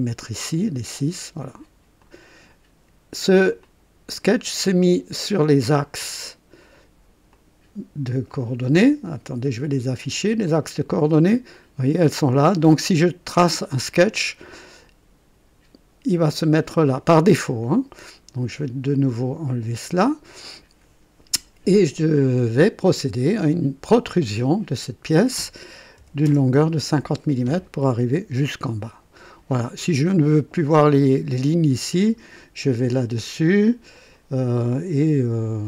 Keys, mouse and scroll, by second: 2.0 click, 3.0 scroll down 2, 3.6 click, 7.3 click, 10.4 click, 11.5 click, 12.3-12.6 scroll up 1, 13.0 right click, 13.8 right click, 14.4-16.6 drag, 18.5 click, 19.7 click, 23.2 click, 25.9 KP_5, 26.3 KP_0, 26.5 Return, 32.0 click, 33.9 click, 34.7-35.0 scroll up 1.